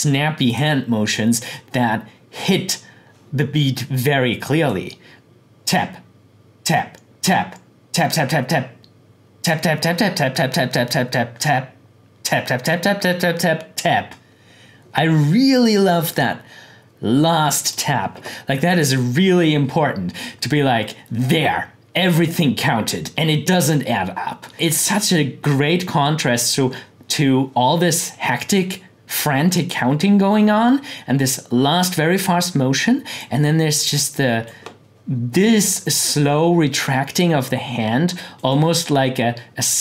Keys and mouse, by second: 3.8-5.2 drag, 16.2-18.7 drag, 24.5-28.9 drag, 29.5 click, 33.2-37.1 drag, 38.4 click.